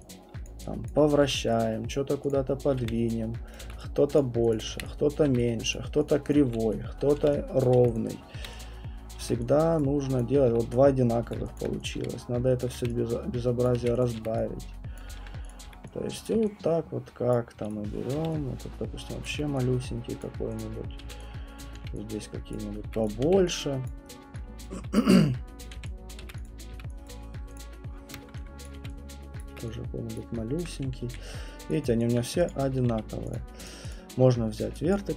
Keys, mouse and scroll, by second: 0.5 click, 0.9 click, 1.2 w, 1.9 click, 2.3 click, 2.8 r, 3.5 click, 3.6 w, 4.2 click, 4.5 click, 4.7 r, 5.1 click, 5.3 w, 5.7 click, 6.1 click, 6.5 click, 6.5-9.2 typing, 7.1 click, 7.6 click, 7.9 click, 9.1 click, 9.8 click, 10.3 click, 10.5 w, 11.3 click, 11.6 alt+click, 11.9 alt+click, 12.0 w, 12.6 click, 12.8 r, 13.7 click, 13.8 q, 14.0 click, 14.2 w, 15.0 click, 15.5 click, 15.7 w, 16.3 click, 17.1-18.1 typing, 17.3 click, 17.7 click, 19.3 click, 20.2 click, 20.2 w, 20.6 click, 21.0 w, 21.6 click, 21.7 r, 22.5 click, 22.8 w, 23.1 click, 23.3 r, 23.9 click, 24.6 click, 24.7-27.2 typing, 25.6 click, 26.1 click, 26.4 click, 27.1 click, 27.6 click, 28.7 click, 28.7 r, 29.4 click, 29.5 w, 30.2 click, 31.0 q, 31.4 scroll, 32.1 alt+click, 32.5 click, 32.9 middle click, 32.9 q, 33.3 click, 33.7 click, 33.9 alt+click, 34.6 alt+click, 34.6 right click, 34.9 alt+click.